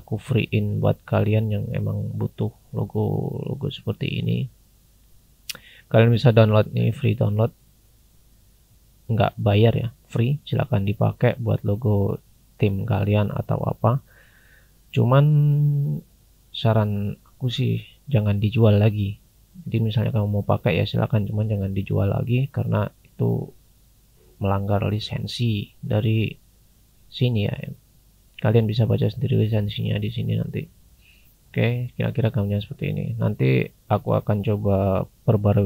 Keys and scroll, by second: 1.0 scroll down 1, 13.9 scroll down 1, 24.7-25.1 scroll down 1, 25.6 scroll down 1, 31.2-32.1 scroll down 1, 32.1 scroll up 1, 34.4 scroll down 1, 34.6-35.6 scroll up 1.